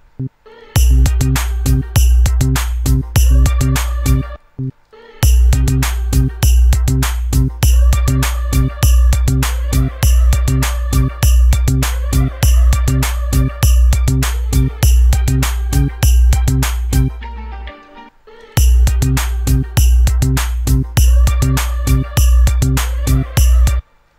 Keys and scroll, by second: 4.5 space, 18.3 space, 24.0 space.